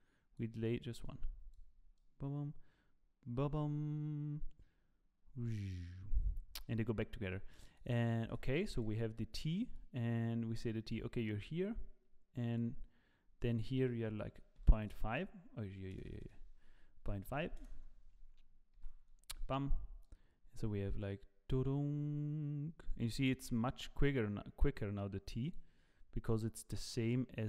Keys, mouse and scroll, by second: 1.0 click, 2.0 click, 8.3 click, 8.7 click, 11.8 click, 13.4 click, 14.3 KP_Decimal, 16.1 BackSpace, 16.2 BackSpace, 18.8 i, 20.0 click, 26.7 click.